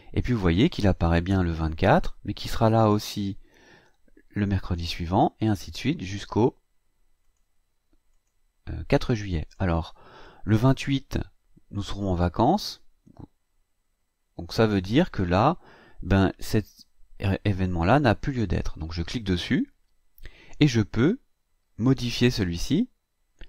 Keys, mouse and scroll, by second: 2.7 click, 4.6 click, 5.4 click, 7.2 click, 8.1 click, 9.4 click, 19.4 click.